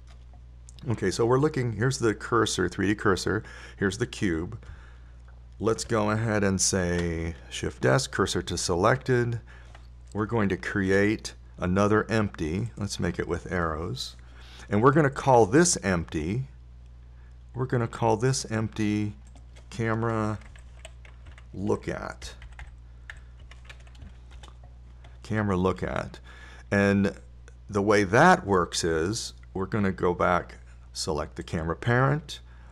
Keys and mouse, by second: 8.2 shift+s, 12.1 shift+a, 14.2 shift+a, 24.1 o.